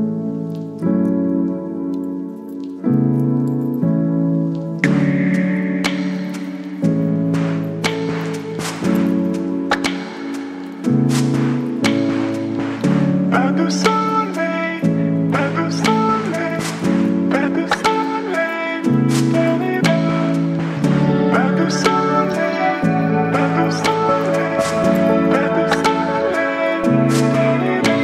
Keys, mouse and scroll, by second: 0.6 ctrl+j, 4.4-7.2 drag, 7.2 right click, 8.0 click, 10.2-15.2 drag, 15.2 ctrl+c, 15.9 Return, 18.0 click, 18.5-20.8 scroll up 1, 20.8 click, 25.5 click, 26.9 b, 27.4 right click.